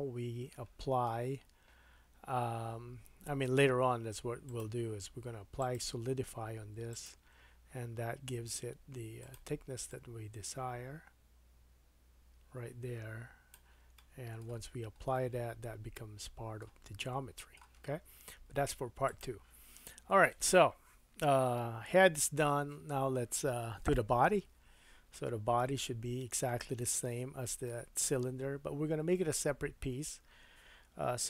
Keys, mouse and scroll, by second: 4.5 click, 4.6-5.6 middle drag, 5.6-9.3 drag, 9.3 middle click, 9.9-21.8 drag, 14.0 middle click, 14.6-15.1 scroll up 1, 15.1 middle click, 17.0 middle click, 19.9-20.2 scroll down 2, 20.2 middle click, 25.6 KP_1, 26.9 shift+middle click.